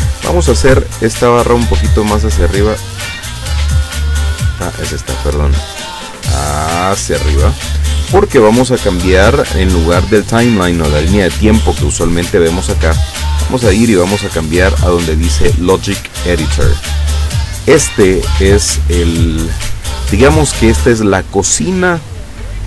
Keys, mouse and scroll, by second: 1.2-2.2 drag, 3.2 click, 5.9-8.1 drag, 13.2 click, 15.8 click, 21.8 click.